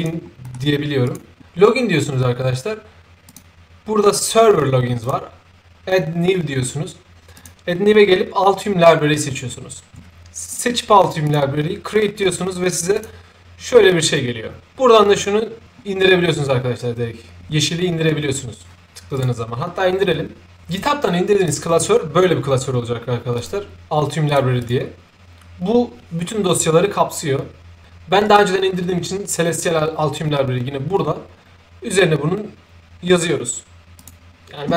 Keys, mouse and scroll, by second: 0.4 middle click, 1.0 click, 3.2 click, 5.0 click, 7.3 click, 10.5 click, 11.2 click, 12.9 click, 19.1 click, 21.3 click, 21.5 click, 23.3 click, 24.2 click, 24.5 click, 28.2 click, 33.9 click.